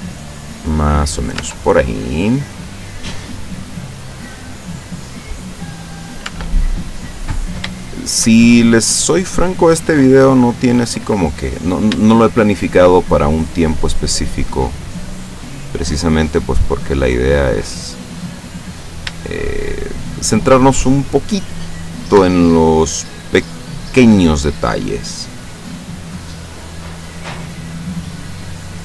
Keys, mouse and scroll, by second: 1.4 Tab, 2.1-5.9 middle drag, 6.3 Tab, 6.9 middle click, 7.9 shift+middle click, 8.5-10.0 shift+middle drag, 10.6-12.0 middle drag, 12.4 shift+middle click, 13.6 right click, 14.5-15.5 drag, 16.0 right click, 16.7-17.7 drag, 17.9 middle click, 18.7 middle click, 19.4 shift+middle click, 20.3 middle click, 21.8 right click, 22.4 shift+right click, 22.8 shift+right click, 24.9-26.9 drag, 27.0-28.8 middle drag.